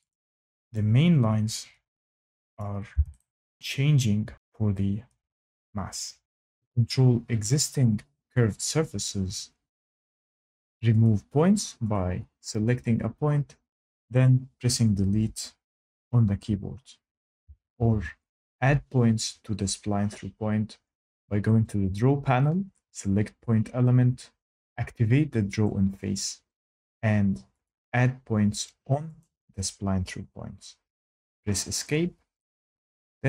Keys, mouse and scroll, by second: 0.0 click, 2.5 click, 11.3 click, 12.2 click, 16.6 Delete, 18.0 ctrl+z, 23.3 click, 26.0 click, 28.0 click, 29.5 click, 31.3 Escape.